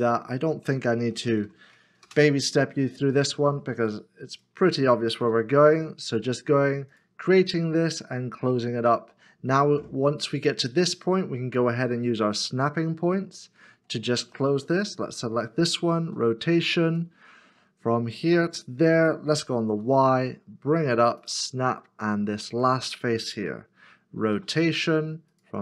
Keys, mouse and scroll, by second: 1.2-1.9 typing, 2.0 Return, 2.8 Return, 2.9 scroll down 1, 3.5 shift+middle click, 5.3 r, 12.7 middle click, 16.3 r, 19.7 y, 21.7 middle click, 24.5 r.